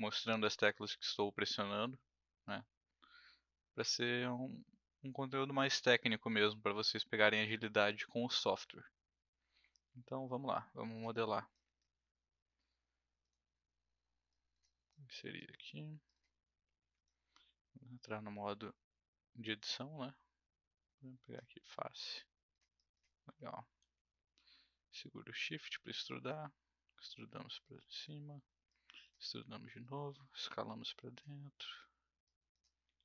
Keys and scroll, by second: 23.8 w, 29.3 r, 31.6 w, 32.8 r.